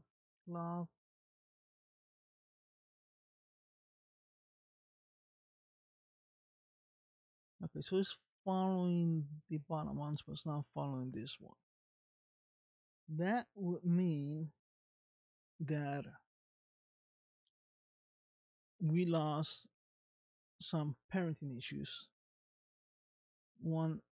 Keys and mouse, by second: 1.2 space, 2.5 space, 3.8 click, 4.8 space, 7.4 space, 18.4-19.5 middle drag, 20.1 middle click, 23.0 ctrl+z, 23.8 ctrl+z.